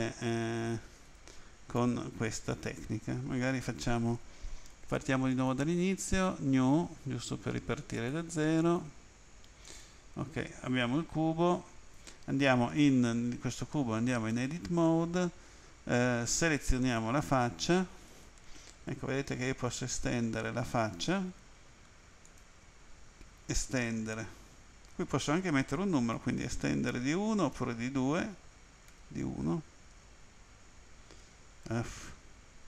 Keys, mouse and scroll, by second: 1.1 right click, 1.8 e, 2.5 click, 5.3 click, 6.1 click, 7.9 click, 8.6 click, 9.7 click, 14.3 Tab, 16.8 click, 18.1 right click, 19.7 e, 22.3 ctrl+click, 23.5 e, 26.1 1, 27.5 2, 28.9 1, 30.2-30.6 scroll up 3, 30.6-30.9 scroll down 3, 31.4 scroll down 3, 31.7 Escape.